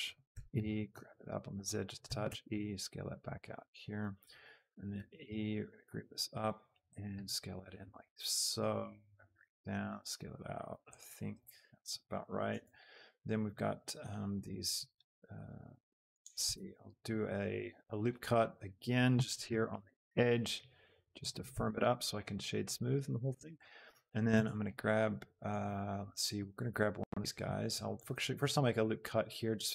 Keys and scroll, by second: 0.0 s, 0.2 e, 0.6 Escape, 0.9 z, 2.0 e, 2.4 s, 5.0 e, 5.3 Escape, 6.1 z, 7.2 s, 16.3 Tab, 17.1 ctrl+r, 21.5 Tab, 24.4 Tab, 27.7 ctrl+t, 28.4 ctrl+r.